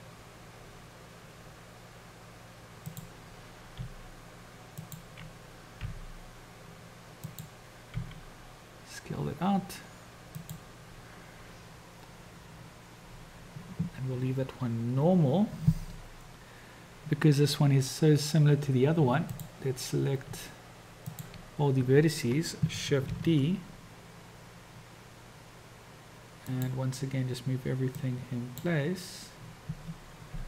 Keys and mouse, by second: 4.0 g, 5.9 r, 8.1 s, 19.2 shift+click, 21.1 shift+click, 23.1 shift+d, 28.0-28.8 drag, 30.2 g.